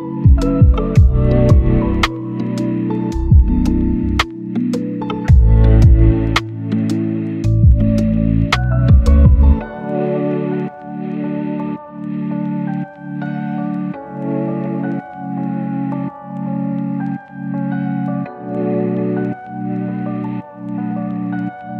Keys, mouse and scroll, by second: 1.0-4.7 drag, 4.7 right click, 7.8-9.8 drag, 9.9 scroll up 1, 10.0 right click, 10.2 click, 12.5 right click, 13.2 click, 13.8 right click, 14.4 click, 15.0 right click, 15.2 scroll down 1, 15.3-17.1 scroll up 2, 15.5 click, 17.1 right click, 18.4 scroll down 1, 18.5 scroll up 1, 18.6 right click, 19.0 click, 20.3-20.8 scroll up 1, 20.8 click.